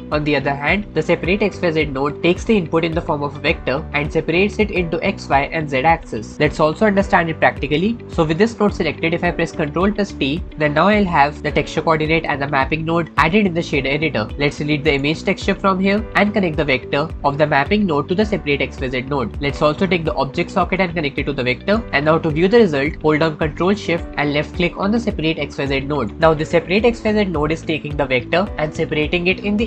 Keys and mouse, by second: 6.6 x, 7.5 click, 9.9 ctrl+t, 14.3 click, 14.5-14.8 drag, 15.1 x, 18.0-19.4 drag, 20.6 click, 20.9-21.6 middle drag, 25.8 ctrl+shift+click.